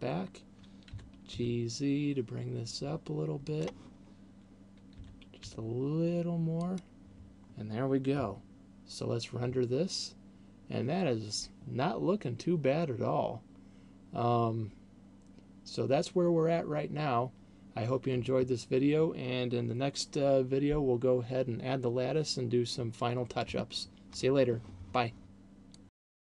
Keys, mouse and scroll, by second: 1.4 g, 3.9 click, 5.2 g, 6.9 click.